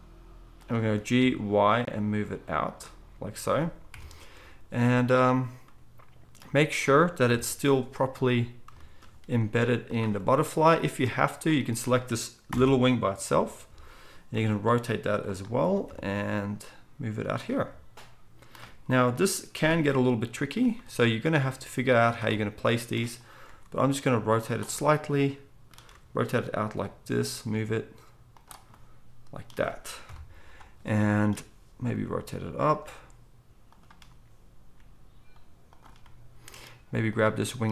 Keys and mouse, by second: 0.9 g, 3.9 KP_1, 4.4 z, 7.3 KP_1, 9.4 g, 12.5 ctrl+l, 13.2 KP_7, 14.3 r, 16.2 g, 21.3 g, 23.4 r, 25.9 r, 27.3 g, 30.0 KP_1, 31.9 r, 32.8 g, 34.8 g.